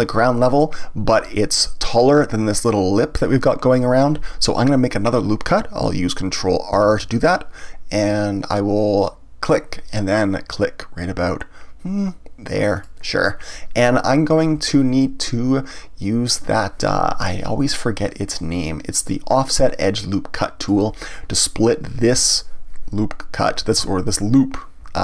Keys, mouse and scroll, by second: 6.7 ctrl+r, 12.8 click, 18.3-21.3 drag.